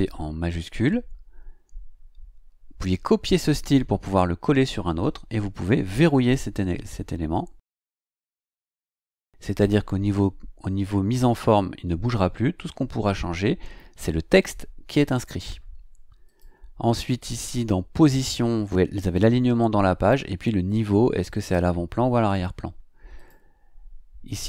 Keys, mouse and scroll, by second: 16.2 click, 17.2 click, 23.1 click.